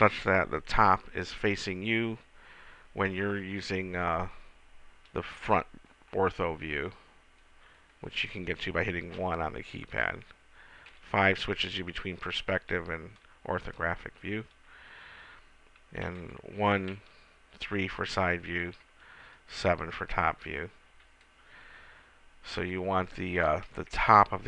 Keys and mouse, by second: 0.0 KP_1, 9.6 KP_1, 11.3 KP_5, 13.0 KP_5, 16.5 KP_1, 17.3 KP_3, 19.5 KP_7, 21.8 KP_1, 23.4-24.4 middle drag.